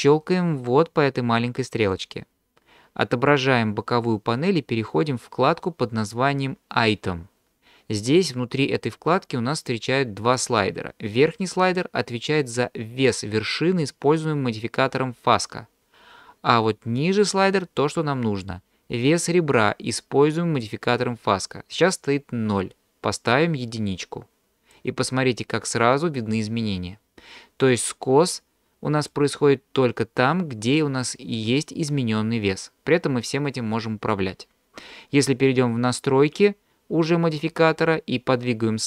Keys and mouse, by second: 1.9 click, 23.2-24.8 drag, 28.3 click.